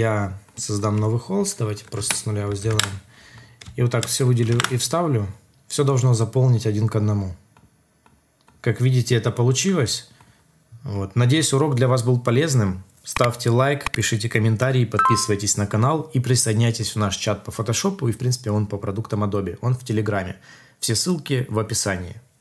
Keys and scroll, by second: 2.0 Return, 2.6 alt+Tab, 4.5 alt+Tab.